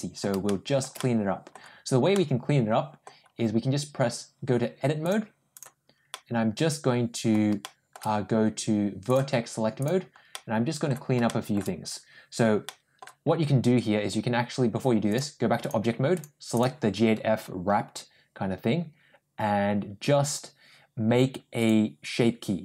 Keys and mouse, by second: 0.3 shift+middle click, 0.8 middle click, 2.0-2.8 middle drag, 4.9 click, 6.0-7.2 middle drag, 7.4 shift+middle click, 8.9 click, 9.6 click, 10.2 middle click, 11.1 shift+middle click, 12.5 middle click, 15.1 click, 16.0 click.